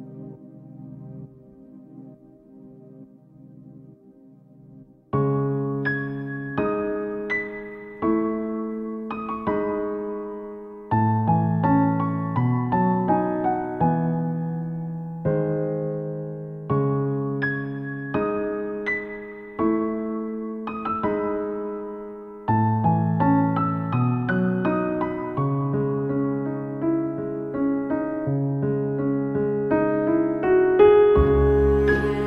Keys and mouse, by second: 3.4 ctrl+z, 4.3 ctrl+z, 4.5 ctrl+z, 5.6 ctrl+z, 6.5 right click, 11.3 ctrl+z, 11.9 ctrl+z, 12.0 ctrl+z, 12.2 ctrl+z, 12.5 ctrl+z, 13.5 ctrl+z, 14.3 ctrl+z, 15.6 ctrl+z, 17.4 ctrl+z, 18.7 ctrl+z, 18.8 right click, 19.0 right click, 19.2 ctrl+z, 25.1 ctrl+z, 25.3 ctrl+z, 25.4 ctrl+z, 25.6 ctrl+z, 25.7 ctrl+z, 25.8 ctrl+z, 26.0 ctrl+z, 26.3 ctrl+z, 27.4 ctrl+z, 27.6 ctrl+z, 28.4 ctrl+z, 28.6 ctrl+z, 30.3 ctrl+z.